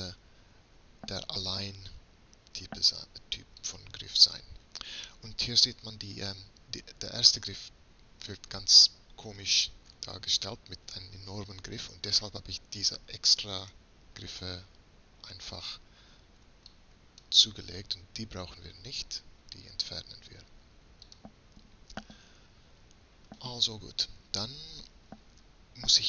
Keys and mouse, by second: 0.2 a, 0.5 a, 0.9 a, 3.7-5.7 drag, 10.2-12.2 middle drag, 12.5 middle click, 13.7-15.7 drag, 16.5 b, 19.0 x, 22.1 middle click, 22.6 middle click, 23.5 middle click.